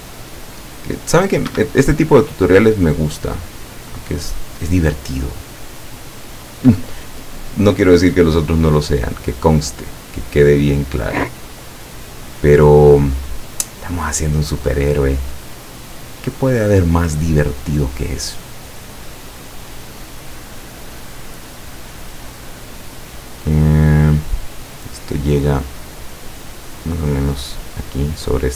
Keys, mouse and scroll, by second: 1.6 Escape, 3.2 click, 6.0 click, 7.7 click, 9.0 click, 11.0 click, 15.9 click, 23.0 click.